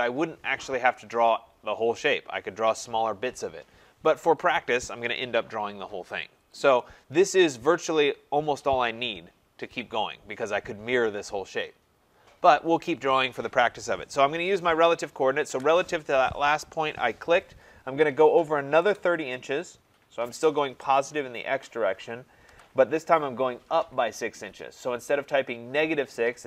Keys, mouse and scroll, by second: 15.0 click, 15.5 @, 18.8 typing, 22.5 ,.